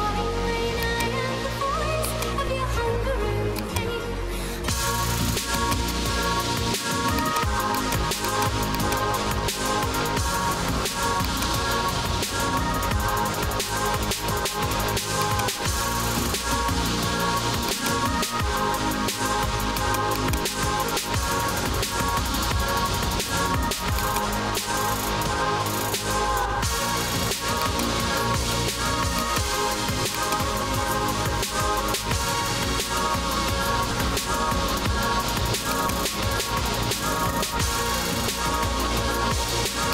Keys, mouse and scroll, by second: 0.6-1.8 typing, 0.9 click, 2.1 click, 3.6 click, 4.4-5.5 typing, 4.8 scroll, 5.6 click, 7.2 click, 7.8 click, 8.4 click, 8.8 click, 11.3 click, 15.3 click, 17.8 click, 17.8-18.8 typing, 19.8 click, 20.3 click, 21.3-23.1 typing, 24.1 click, 24.5-25.8 typing, 27.8 click, 29.2 click, 30.2 click, 31.1-32.5 typing, 35.8 alt+click, 35.9-39.2 typing.